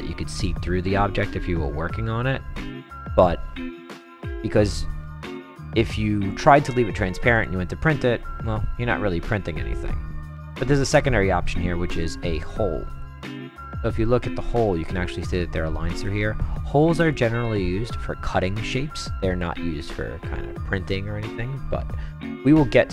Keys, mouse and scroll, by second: 0.8 click, 4.3 click, 6.3 click, 7.3 click, 7.9 click, 9.8 click, 10.3-10.7 right drag, 10.9 click, 12.0 click, 13.0-14.9 right drag, 16.0-16.4 right drag, 16.8-17.1 right drag, 17.8 click.